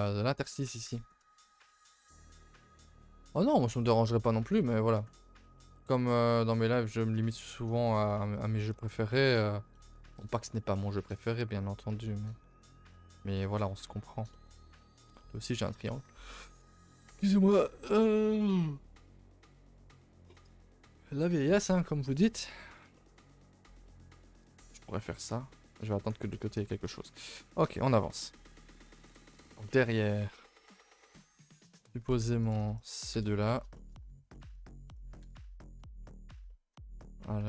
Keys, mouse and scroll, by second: 3.8 shift+middle click, 4.2 scroll up 2, 4.4 a, 4.5 a, 4.6 middle click, 5.2 shift+middle click, 5.9 middle click, 6.2 scroll up 2, 6.5 middle click, 6.6 middle click, 6.9 shift+middle click, 7.2 scroll down 3, 7.5 middle click, 7.8 shift+middle click, 8.1 middle click, 8.4 scroll, 9.0-10.3 middle drag, 10.6 middle click, 10.9 middle click, 11.6 middle click, 11.8 middle click, 12.5 a, 12.7 a, 12.8 scroll down 2, 13.1 ctrl+s, 13.4-14.9 middle drag, 14.9 a, 15.1 a, 15.2 middle click, 15.6 a, 15.7 a, 15.8-17.2 middle drag, 17.3-20.2 middle drag, 22.3 middle click, 22.6 scroll up 3, 22.9 shift+middle click, 23.4 a, 23.5 a, 23.7 middle click, 23.8 scroll down 2, 24.1 middle click, 24.5 ctrl+r, 25.5 middle click, 25.9 a, 26.2 ctrl+s, 26.3 middle click, 26.5-26.9 scroll down 1, 26.9 middle click, 28.0 middle click, 29.2 KP_0, 30.3 middle click, 30.9-31.4 scroll up 5, 31.2 middle click, 31.9 scroll up 4, 32.1 2, 32.4 click, 32.7 shift+click, 33.1 KP_0, 34.3 middle click, 34.5 z, 35.2 KP_0.